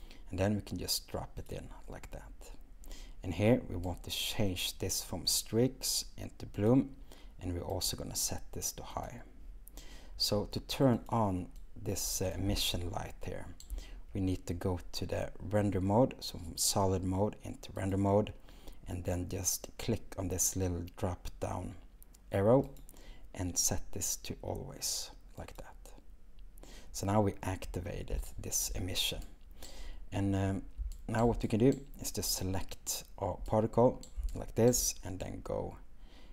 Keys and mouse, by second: 1.4-2.1 drag, 7.7-9.1 drag, 11.1 click, 18.0-21.6 drag, 22.8-26.8 drag, 31.7-32.4 drag.